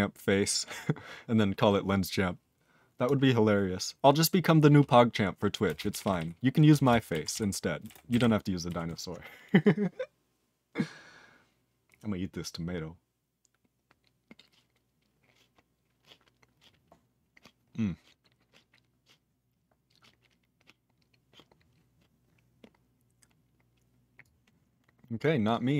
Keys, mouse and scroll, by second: 5.6 ctrl+space, 5.7 ctrl+p, 5.9 ctrl+p, 6.0 ctrl+p, 6.1 ctrl+e, 6.7 BackSpace, 7.4 ctrl+s, 7.8 ctrl+space, 7.8 ctrl+a, 7.9 ctrl+p, 8.1 ctrl+n, 8.1 ctrl+e, 8.8 ctrl+s, 18.2 scroll down 2, 19.6-21.2 scroll down 1, 21.2 scroll up 5, 24.2 click, 25.2 click, 25.4 click, 25.5 click.